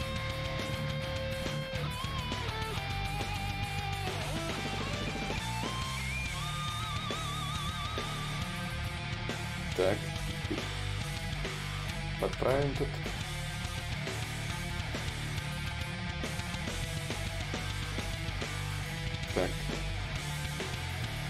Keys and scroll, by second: 3.2 ctrl+y, 3.2 ctrl+z, 6.3 ctrl+z, 7.1 shift+d, 8.9 s, 16.2 ctrl+z, 16.2 y.